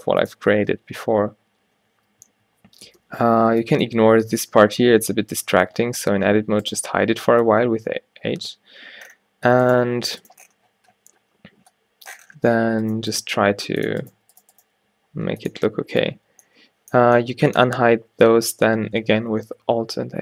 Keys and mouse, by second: 0.0 g, 0.6 Tab, 2.0 Tab, 2.3 Tab, 2.9 Tab, 3.2 a, 3.5 b, 4.7 h, 5.1 Tab, 5.6 Tab, 6.1 a, 7.5 h, 12.1 middle click, 13.4 g, 14.2 g, 14.7 g, 15.6 Tab, 16.1 Tab, 18.2 a, 18.5 a.